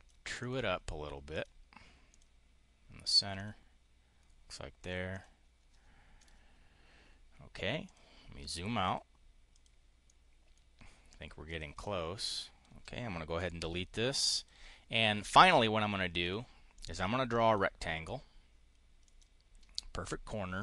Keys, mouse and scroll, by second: 0.3 click, 1.2 click, 2.0 click, 3.3 click, 4.6 click, 5.0 click, 6.0 click, 7.7 click, 8.2 click, 8.7 click, 9.4 click, 9.9 click, 11.2 click, 11.6 click, 12.1 click, 13.2 Delete, 14.2 click, 16.0 click, 16.5 click, 18.9 click.